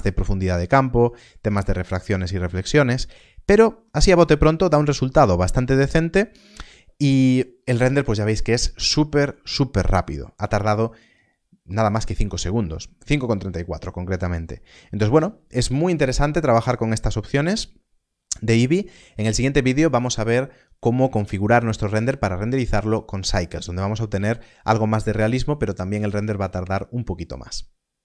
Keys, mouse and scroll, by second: 0.2 middle click, 0.7 scroll up 1, 1.4 scroll down 1, 2.0 middle click, 3.3 scroll down 1, 3.8 scroll up 1, 4.0 middle click, 4.3 scroll down 1, 4.9 scroll up 1.